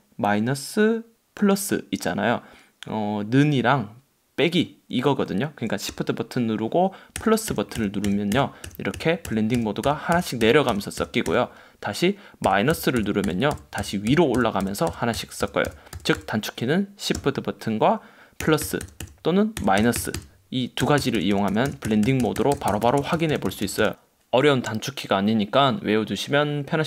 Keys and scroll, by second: 7.3 shift+=, 12.6 shift+-, 18.5 shift+=, 19.7 shift+-, 20.9 shift+=.